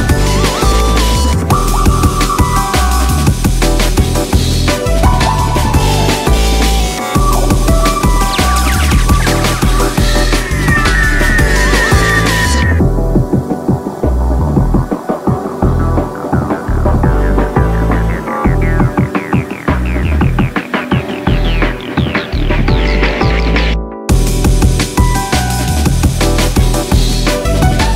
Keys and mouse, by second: 4.0 alt+click, 5.2 alt+click, 6.7 alt+click, 8.9 alt+click, 13.9-23.0 alt+drag, 23.5 alt+click, 25.6 alt+click, 26.7 alt+click.